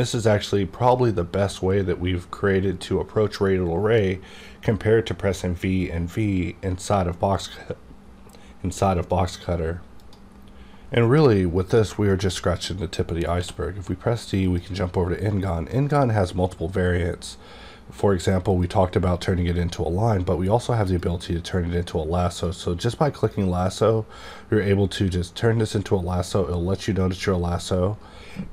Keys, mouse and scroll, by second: 0.1-5.7 drag, 13.4 d, 14.5 click, 18.5 click.